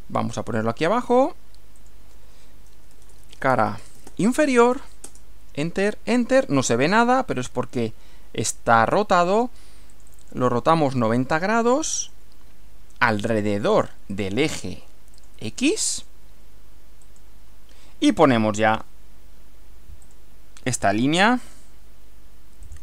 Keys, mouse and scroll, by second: 1.1 click, 1.8 click, 2.7-4.6 typing, 7.4-8.6 middle drag, 9.9 click, 11.7 click, 12.8-13.6 typing, 13.8 click, 14.1 click, 15.1 click, 16.0 click, 17.1 click, 18.7 click, 20.1 click, 21.4 click, 22.7 click.